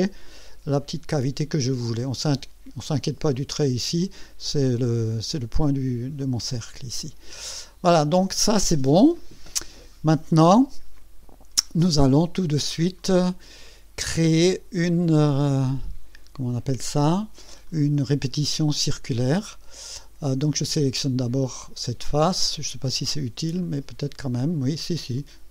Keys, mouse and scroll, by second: 0.7-2.4 drag, 3.5-4.1 drag, 6.2 click, 7.4 click, 10.2 space, 10.9-12.0 drag, 12.9-13.6 right drag, 17.6-20.3 drag, 20.9 click, 23.6-25.5 drag.